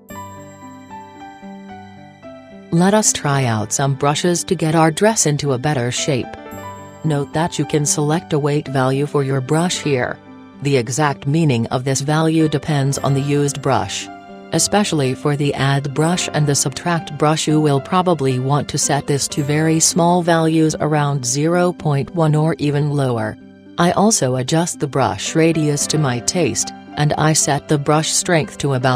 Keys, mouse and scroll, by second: 16.0-17.9 drag, 27.4-28.9 drag.